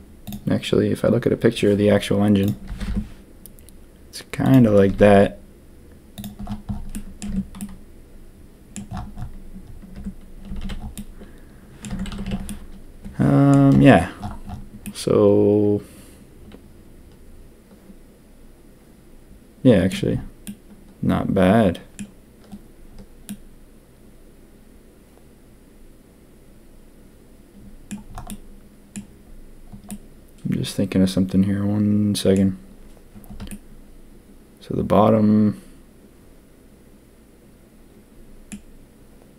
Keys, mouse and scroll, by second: 2.6 g, 4.8 s, 6.9 click, 7.2 Tab, 7.5-8.7 drag, 9.9 Tab, 10.4 a, 10.6 a, 10.9 middle click, 11.8 Tab, 12.0 a, 12.2 a, 12.4-13.5 middle drag, 14.8-19.9 middle drag, 20.4-21.9 middle drag, 23.2-27.8 middle drag, 28.2 middle click, 29.8-32.3 middle drag, 33.4-38.4 middle drag.